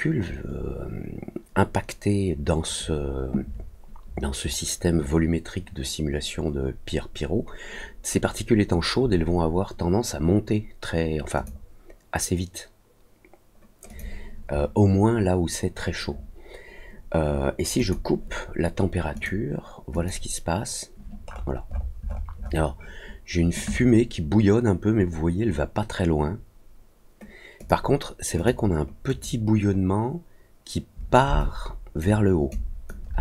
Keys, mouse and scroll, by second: 11.3 click, 13.8 click, 17.7 click, 19.1 click, 19.9 click, 21.2 scroll up 1, 21.4 scroll down 1, 21.6-22.1 scroll up 2, 22.1 middle click, 22.3 middle click, 27.5 click, 28.3 click, 29.0 click, 31.3 alt+click, 32.4 alt+click.